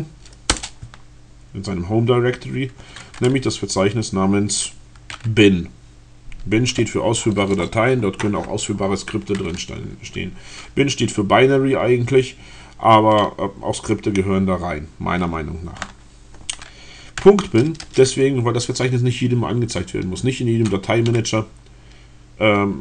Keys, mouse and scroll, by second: 0.2 Return, 17.9 BackSpace.